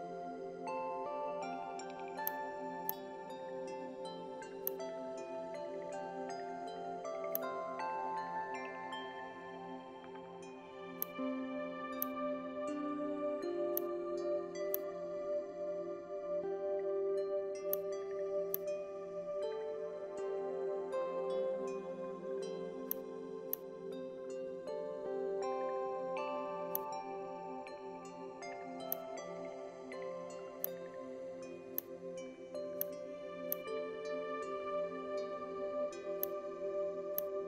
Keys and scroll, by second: 6.0 Delete, 8.8 ctrl+g, 19.8 Down, 20.0 Down, 20.1 Down, 20.3 Down, 21.6 Down.